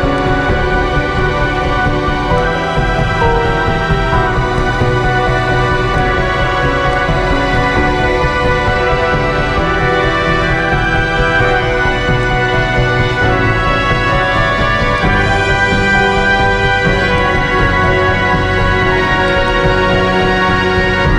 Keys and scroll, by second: 9.9 Down.